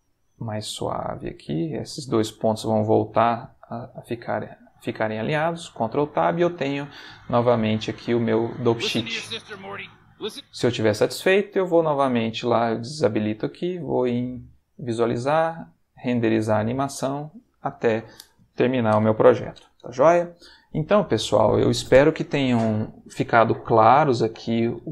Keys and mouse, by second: 0.2 click, 0.4 g, 1.3 click, 2.5 click, 2.7 g, 4.7 click, 5.3 ctrl+Tab, 6.6-8.6 drag, 8.6 space, 10.3 space, 12.8 click, 14.0 click.